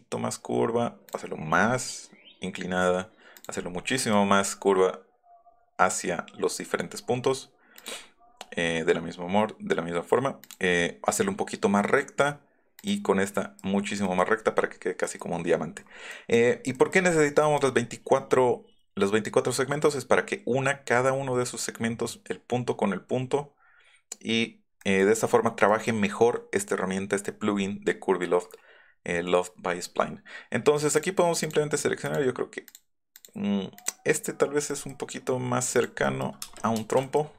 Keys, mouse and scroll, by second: 1.1 click, 3.4 click, 4.3 scroll up 2, 10.5 click, 12.8 click, 13.4 click, 13.6 Escape, 13.9 middle click, 14.2 middle click, 15.1 click, 15.4 middle click, 15.8 middle click, 16.0 middle click, 16.4 middle click, 17.1 middle click, 17.4 middle click, 17.6 middle click, 18.4-19.0 scroll up 3, 24.8 click, 25.7 middle click, 26.1 Up, 30.0 scroll down 2, 31.0 click, 31.5 click, 32.1 click, 32.7 click, 33.2 click, 35.2 middle click, 35.8 click, 36.5 space.